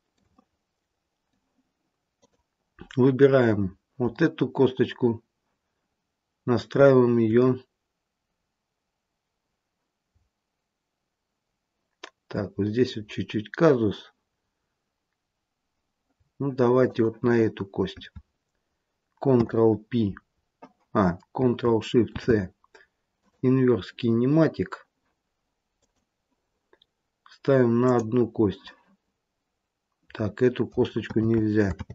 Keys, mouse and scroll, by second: 0.3 middle click, 2.0 click, 16.7 shift+click, 19.2 ctrl+p, 22.0 ctrl+shift+c, 25.7 click, 27.7 click, 31.1 ctrl+z, 31.8 ctrl+z.